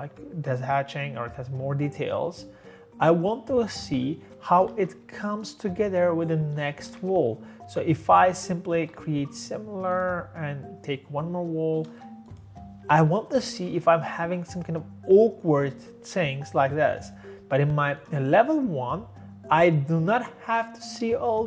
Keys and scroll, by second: 4.4-5.1 typing, 6.7 Escape, 7.6 Escape, 8.5-9.3 typing, 11.9 space, 12.8 Escape.